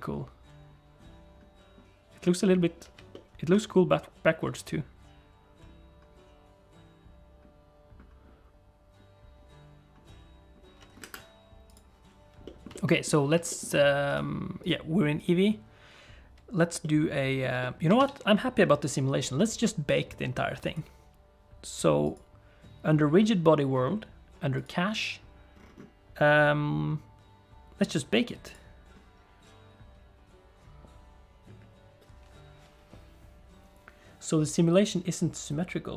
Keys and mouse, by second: 3.1 shift+click, 3.2 shift+middle click, 12.5-14.5 middle drag, 18.5 a, 24.6 click, 28.4-35.9 drag.